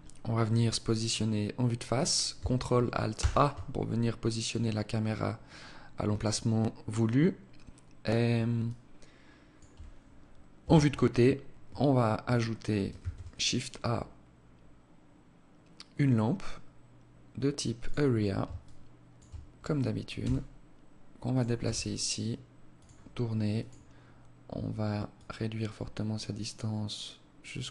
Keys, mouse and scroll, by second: 2.4 ctrl+alt+KP_0, 7.9 alt+click, 9.9 KP_3, 12.3 shift+a, 17.9 alt+shift+click, 19.5 g, 20.9 r, 23.0 click, 24.4 click.